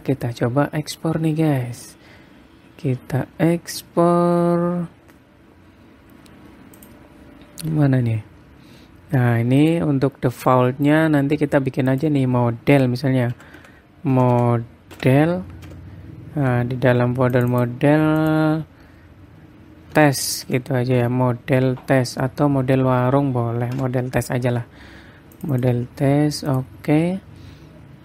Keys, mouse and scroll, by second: 0.5-1.4 scroll down 6, 5.6-6.6 scroll up 6, 7.4 click, 8.3-10.2 scroll up 9, 10.2 click.